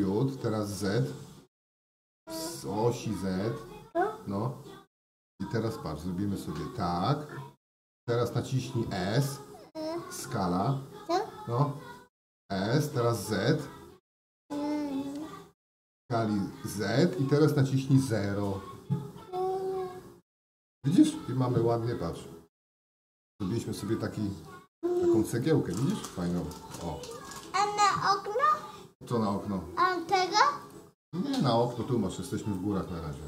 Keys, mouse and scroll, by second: 12.0 s, 23.5 g, 25.4-27.5 middle drag, 30.6 click, 32.5 middle click.